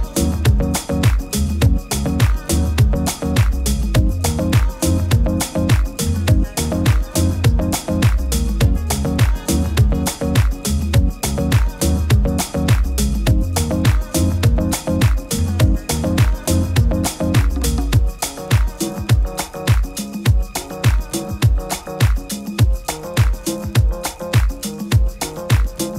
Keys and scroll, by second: 13.1 super++, 13.3 super++, 13.4 super++, 15.6 super++, 15.8 super++.